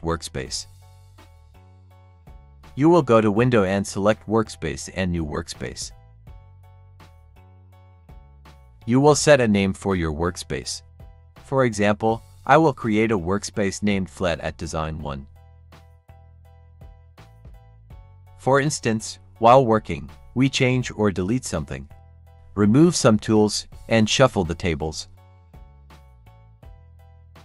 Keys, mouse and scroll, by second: 3.2 click, 7.7 click, 12.6-18.4 typing, 12.6 click, 20.9-27.4 drag.